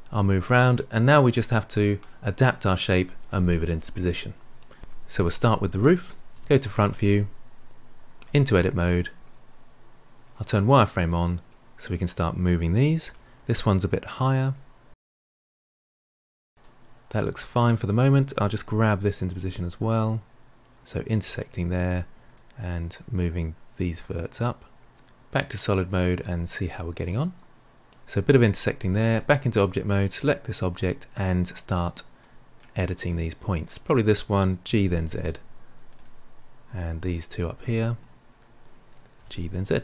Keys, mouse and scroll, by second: 5.0 click, 6.2 KP_1, 8.1 Tab, 10.2 click, 11.0 drag, 12.9 g, 13.8 click, 14.0 g, 14.7 click, 14.8 g, 15.3 click, 15.4 g, 16.9 click, 18.3 g, 21.0 Tab, 21.3 drag, 22.4 g, 26.1 click, 26.6-27.5 middle drag, 27.5 click, 29.0 Tab, 29.6 click, 30.6 Tab, 32.1 drag, 33.5 click, 34.6 g, 36.7 click, 37.9 click, 39.1 g.